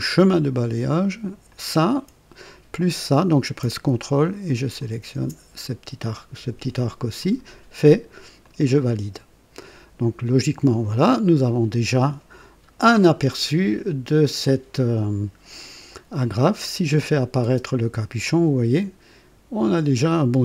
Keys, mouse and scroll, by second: 0.1 click, 1.4 click, 4.8 ctrl+click, 7.1 click, 8.4 click, 17.0 click, 17.4 space, 18.2-20.4 drag.